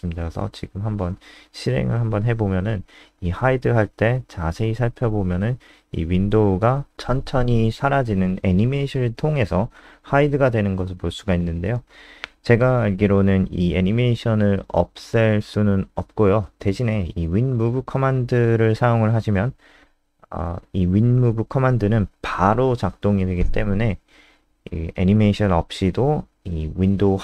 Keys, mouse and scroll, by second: 0.2 click, 3.7 KP_0, 16.8 click, 19.7 Up, 19.7 Down.